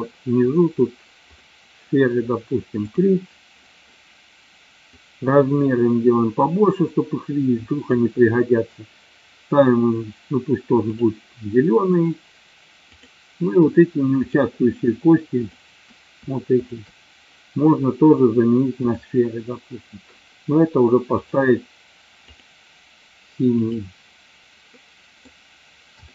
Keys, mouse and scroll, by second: 3.0 click, 5.0-8.0 drag, 13.0 click, 14.3 shift+click, 16.6 shift+click, 21.3 click, 22.3 click, 23.7 click, 24.7 middle click.